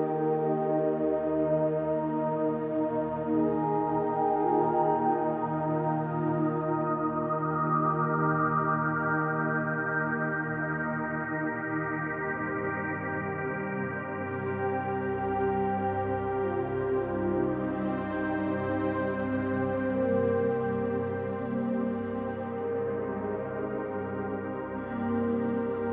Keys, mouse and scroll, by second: 0.0-0.6 drag, 0.8-1.6 middle drag, 2.1-2.4 drag, 3.1-4.1 drag, 4.5-6.2 middle drag, 6.5 s, 7.7 click, 7.9-9.1 middle drag, 9.7 click, 10.8-11.2 drag, 11.4-15.1 middle drag, 15.4-16.0 middle drag, 16.5-17.0 middle drag, 17.7 2, 18.3 click, 18.9 shift+click, 19.4-19.8 middle drag, 20.4 KP_3, 21.9 e, 24.8 click, 25.2-25.8 middle drag.